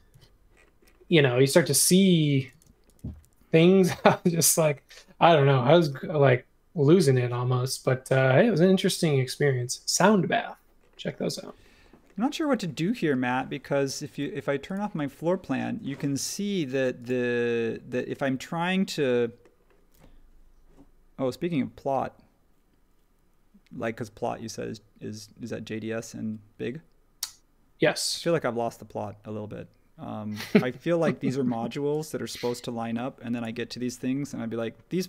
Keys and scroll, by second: 0.1 super+1, 1.2 space, 2.5 space.